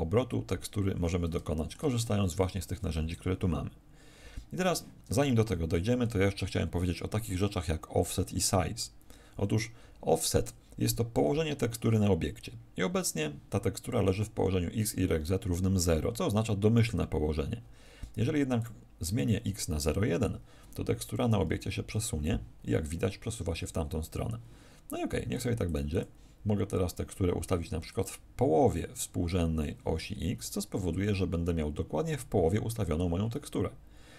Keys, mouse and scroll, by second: 0.7-1.2 scroll up 4, 1.4 shift+middle click.